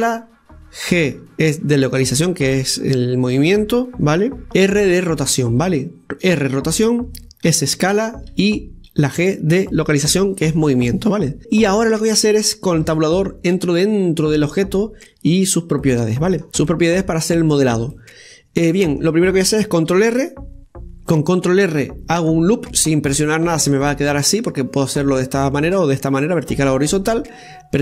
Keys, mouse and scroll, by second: 11.4-13.1 scroll down 3, 13.7 Tab, 16.1-16.5 scroll down 1, 16.5 middle click, 17.0-17.5 scroll up 1, 17.5 middle click, 18.3 scroll up 1, 18.8-20.8 middle drag, 20.8 ctrl+r.